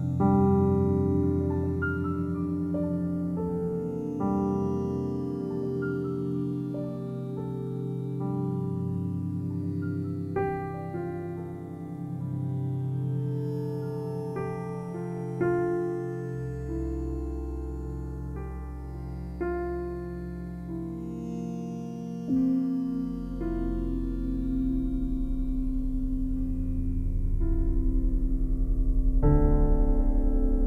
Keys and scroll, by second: 7.0 ctrl+v, 18.8 ctrl+z, 26.4 Return, 29.4-30.3 typing, 30.4 Return.